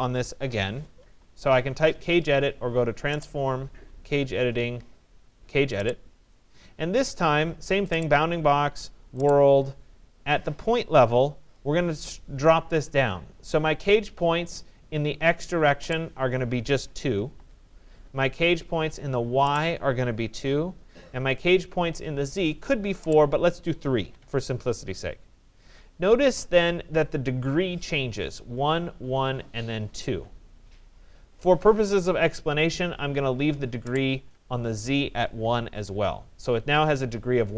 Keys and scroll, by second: 16.7 2, 17.3 Return, 20.3 2, 20.4 Return, 24.0 3, 24.2 Return, 35.2 1, 35.8 Return.